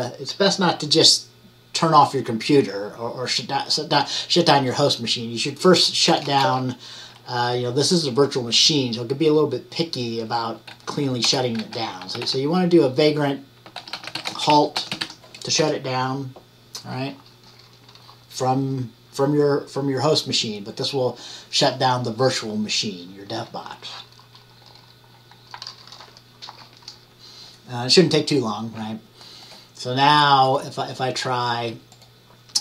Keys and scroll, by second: 6.3-7.0 typing, 10.8-15.6 typing, 17.1-17.9 typing.